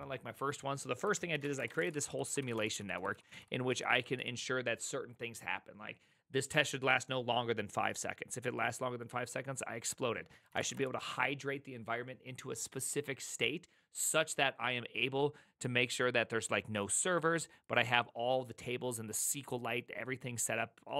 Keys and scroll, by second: 1.1 ctrl+h, 1.2-4.6 typing, 10.3-11.2 typing.